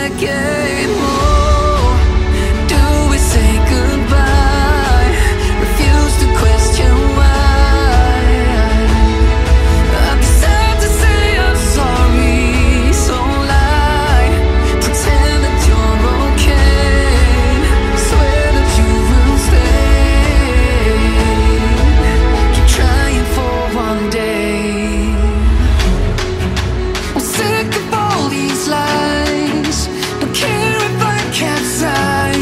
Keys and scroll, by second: 2.2 ctrl+z.